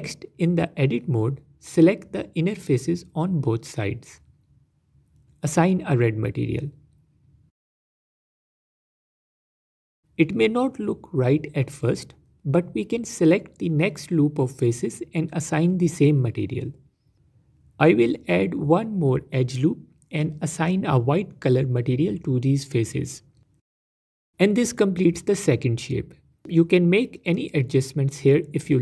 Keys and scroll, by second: 0.2 Tab, 21.4 ctrl+r, 24.2 Tab, 26.0 Tab, 26.1 Tab, 26.9 Tab, 27.8 g, 28.1 g.